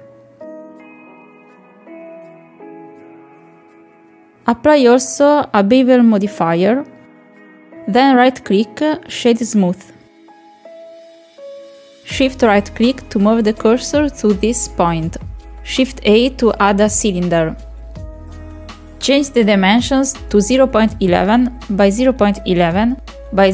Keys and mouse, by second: 0.5 click, 0.9 click, 1.4-1.8 drag, 2.0 click, 2.7 click, 3.2 click, 3.5 Tab, 4.2 middle click, 5.5 click, 7.2 click, 8.3 click, 8.5 click, 8.8-9.4 middle drag, 9.5 middle drag, 9.6 shift+middle drag, 10.4 right click, 11.2-13.5 middle drag, 13.7 shift+middle drag, 13.9-14.3 middle drag, 15.0 shift+right click, 16.0 shift+a, 18.9 click, 19.5 KP_1, 20.2 click, 20.7 KP_1, 21.5-23.5 drag.